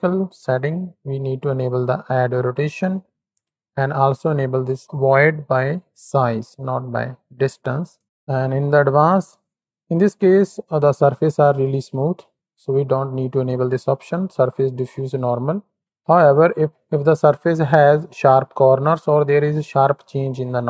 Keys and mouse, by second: 2.1 click, 6.0 click, 7.9 click, 8.1 click, 9.5 middle drag.